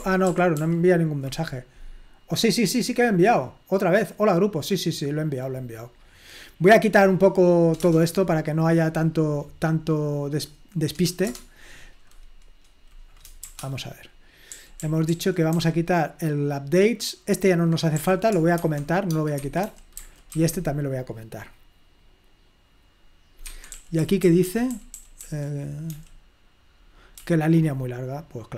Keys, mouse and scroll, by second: 0.3 ctrl+p, 0.5 ctrl+p, 2.8 click, 5.5-7.0 scroll up 1, 7.8 Return, 10.4 click, 11.3 Return, 14.4-16.0 typing, 18.0 typing, 19.1-20.3 typing, 23.5 Escape, 23.7-24.4 typing, 25.9 j, 27.2-28.5 typing.